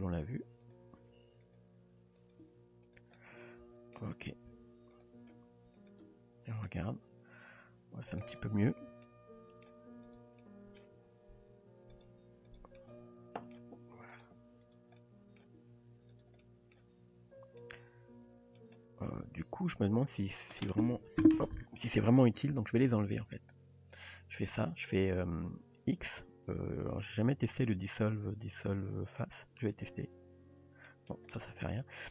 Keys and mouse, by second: 1.0 g, 1.9 r, 2.5 g, 3.2 middle click, 4.3 r, 5.3 g, 6.1 Tab, 6.7-8.3 middle drag, 8.8 Tab, 9.1-9.7 middle drag, 10.0 drag, 10.4-10.8 middle drag, 10.9 g, 12.8-13.6 middle drag, 13.7 g, 14.6 click, 15.0 middle click, 15.6 g, 16.5 middle drag, 16.9 Tab, 17.6-18.6 middle drag, 19.1 Tab, 23.2 click, 23.9 click, 25.7 x, 30.9 shift+middle drag.